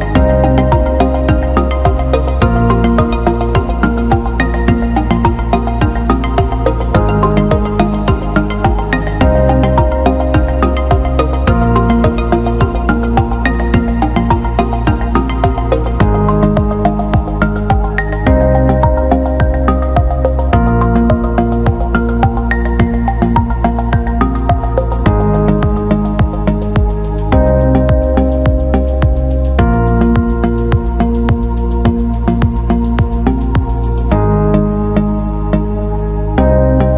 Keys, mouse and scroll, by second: 2.4 click, 3.2-4.6 drag, 5.3 click, 6.2-7.4 drag, 8.8 click, 11.8 click, 12.3 click, 14.0 click, 15.3 click, 16.3 click, 17.0-17.7 alt+middle drag, 18.4 alt+middle click, 19.1 click, 27.0 alt+shift+middle click, 27.4 alt+middle click, 28.9 shift+d, 30.0-31.6 drag, 32.0 alt+shift+middle click, 33.5 shift+d, 34.6-36.9 drag.